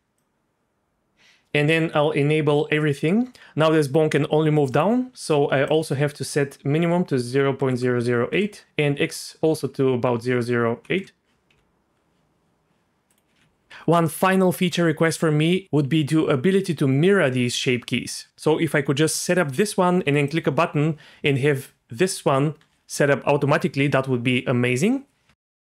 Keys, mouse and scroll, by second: 0.2 click, 3.6 g, 5.7-8.4 drag, 7.7 KP_0, 8.6-11.0 drag, 10.2 KP_0, 11.5 g, 13.3 g, 15.6 d, 18.1 g, 18.8 g, 20.0-22.6 d.